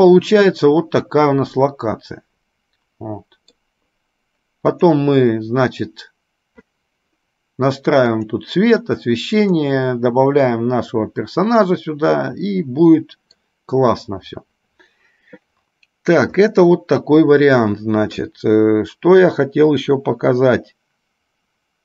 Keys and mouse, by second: 9.9 click, 11.7-13.7 middle drag, 16.7-17.9 middle drag.